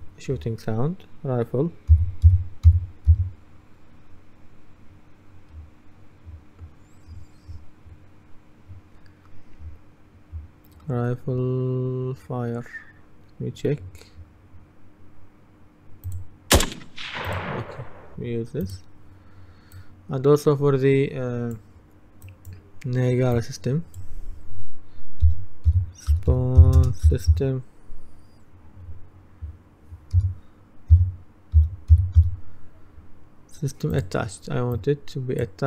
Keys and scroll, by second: 2.0-3.7 typing, 25.1-27.9 typing, 30.2-32.8 typing.